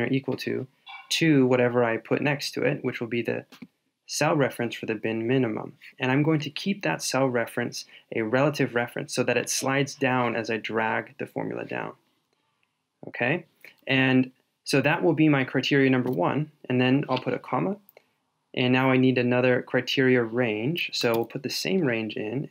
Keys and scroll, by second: 21.2 super+v.